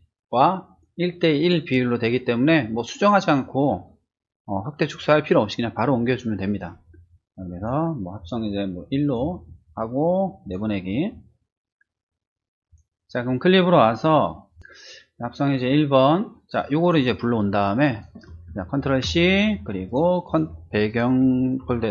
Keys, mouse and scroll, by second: 7.6 click, 8.2 click, 8.8 click, 9.2 1, 10.4 click, 12.7 click, 14.5 click, 16.5 click, 17.9 click, 19.1 ctrl+c, 19.9 click, 20.9 ctrl+click.